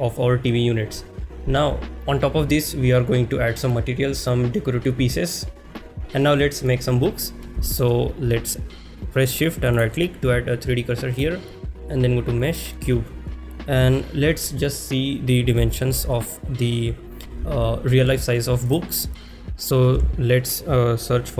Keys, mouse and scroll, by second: 7.7 shift+middle click, 11.3-12.6 drag.